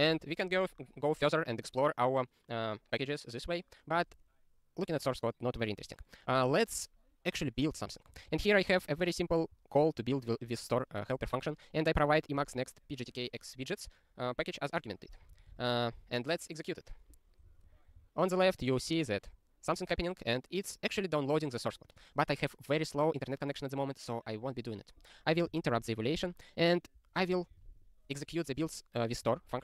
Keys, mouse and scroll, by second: 0.0 ctrl+s, 8.1 ctrl+n, 8.2 ctrl+n, 8.3 ctrl+n, 12.0 click, 15.3 ctrl+n, 18.0 super+o, 25.5 ctrl+b, 26.7 click, 27.3 ctrl+n, 27.5 ctrl+space, 27.6 ctrl+p, 29.1 ctrl+g, 29.2 ctrl+n.